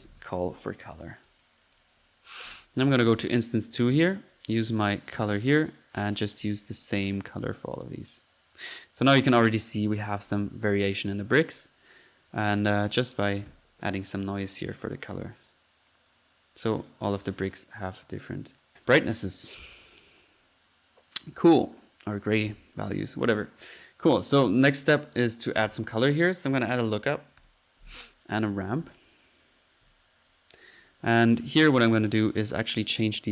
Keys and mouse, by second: 1.3-2.0 drag, 3.0 click, 4.3-5.5 drag, 6.1-7.7 drag, 7.9 click, 9.1-9.6 drag, 10.2 middle click, 10.2-10.6 typing, 10.3-10.6 drag, 10.6 drag, 11.0 drag, 11.6 click, 12.4 click, 14.6-16.4 drag, 18.7 click, 23.0 click, 23.1 drag, 24.7 click, 25.3-26.2 typing, 27.4 click, 28.2 right click, 28.4-29.2 typing, 29.4 click, 29.9-30.8 drag, 30.8 middle click, 31.6 click, 32.5 click.